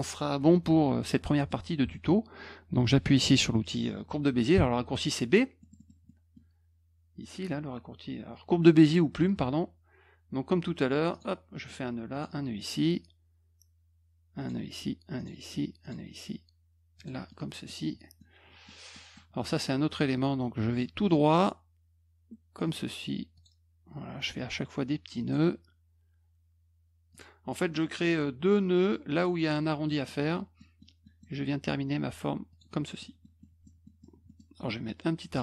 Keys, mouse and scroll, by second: 1.4 middle click, 4.5 b, 5.6 middle click, 5.7 middle click, 6.0 middle click, 11.1 click, 12.1 click, 14.3 click, 15.1 click, 15.8 click, 16.9 click, 17.2 middle click, 18.1 middle click, 18.9 middle click, 20.7 middle click, 22.6 click, 23.3 click, 24.2 click, 25.2 click, 27.1 click, 27.9 click, 30.0 middle click, 30.5 middle click, 31.0 middle click, 32.5 click, 33.0 middle click, 33.4 middle click, 33.8 middle click, 34.2 middle click.